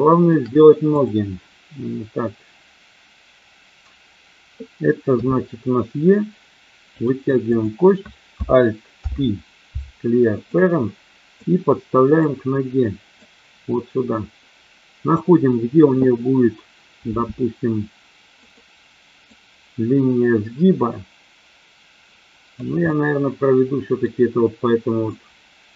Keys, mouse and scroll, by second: 1.0 click, 5.1 e, 7.0 click, 7.5 click, 8.8 alt+p, 11.5 click, 13.1-15.1 drag, 17.1 s, 18.3 click, 19.5-22.6 drag, 22.8-24.1 middle drag, 25.1 middle click.